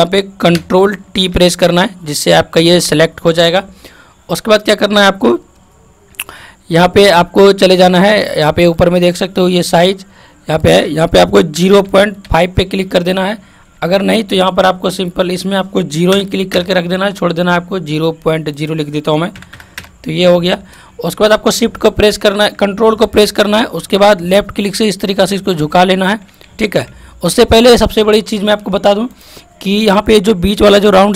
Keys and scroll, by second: 1.0 ctrl+t, 26.5 ctrl+z.